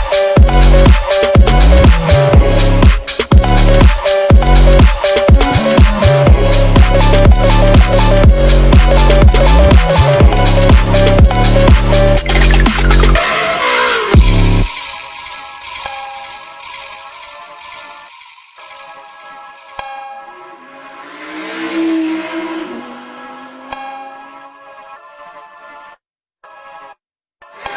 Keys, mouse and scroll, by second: 0.7 Tab, 1.1 click, 1.7 Tab, 2.1-2.6 scroll down 4, 2.4 click, 2.6-3.2 scroll up 3, 3.2 click, 4.4 click, 5.4 ctrl+z, 5.7 ctrl+z, 6.1 ctrl+z, 7.0 Tab, 7.5 click, 8.7 ctrl+z, 9.4 ctrl+z, 10.6 Tab, 10.9-12.1 drag, 12.1 Tab, 12.6 click, 13.4 scroll down 2, 13.7 click, 14.0 shift+click, 14.3 i, 14.9 ctrl+z, 15.1 i, 16.1 s, 16.6 g, 17.6 click, 18.0 e, 18.7 click, 19.2 i, 20.3-20.9 drag, 20.9 e, 21.6-22.3 drag, 22.8 ctrl+z, 23.2-23.9 right drag, 23.9 click, 24.6-25.3 drag, 25.9 scroll down 4, 26.2 click, 26.4 Tab, 26.7 ctrl+s, 27.1 ctrl+s.